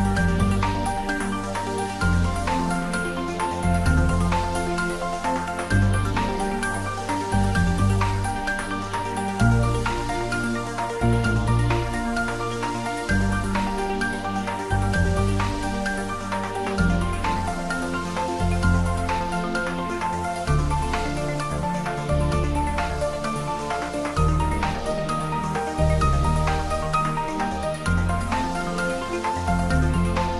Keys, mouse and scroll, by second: 0.3 click, 2.2 scroll up 1, 3.1-3.7 typing, 5.4 click, 5.6 ctrl+z, 5.9 scroll up 1, 6.8-8.4 typing, 7.8 click, 8.9 click, 9.1 scroll down 1, 11.1 g, 12.0 click, 12.3 s, 12.6 y, 13.6 click, 14.7 g, 14.8 y, 15.5 click, 15.8 g, 18.2 click, 18.4 `, 18.6 3, 19.3-19.9 scroll down 1, 19.9 click, 20.3 scroll down 1, 21.4 shift+z, 22.2 shift+z, 22.7 scroll down 1, 23.3 middle click, 23.8 scroll down 1, 24.1 middle click, 25.1 scroll up 1, 25.5-26.8 middle drag, 26.8 g, 27.2 z, 29.8 click, 30.2 shift+d.